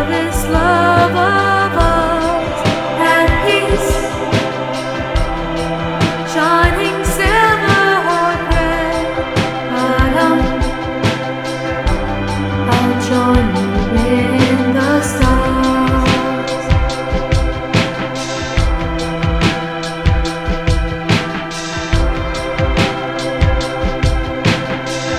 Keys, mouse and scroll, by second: 1.2 z, 15.1 ctrl+click, 16.3 scroll down 2, 16.9 scroll down 2, 18.5 KP_5, 19.5-22.5 shift+middle drag, 24.8 ctrl+alt+p.